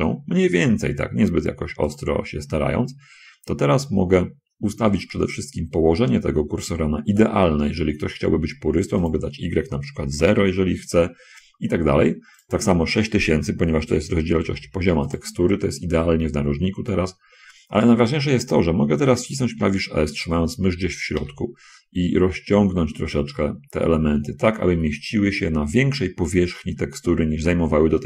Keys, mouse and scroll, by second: 2.3 click, 9.4 click, 10.3 Return, 10.3 0, 12.7 click, 14.1 6, 14.5 0, 14.7 0, 14.9 0, 15.5 click, 21.5 s.